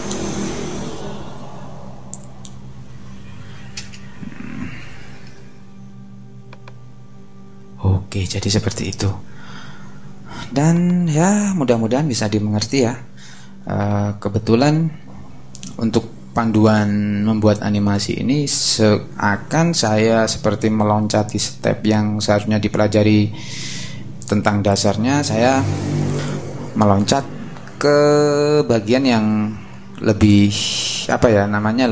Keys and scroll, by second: 3.8 space, 4.7 super+space, 4.8 super+-.